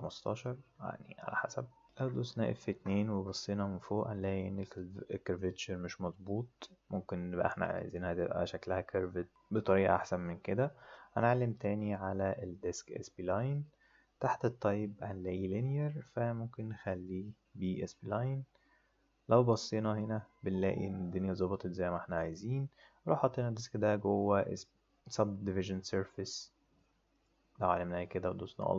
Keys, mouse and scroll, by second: 0.2 click, 2.7 F2, 12.5 click, 15.5 click, 17.6 click, 27.1 click.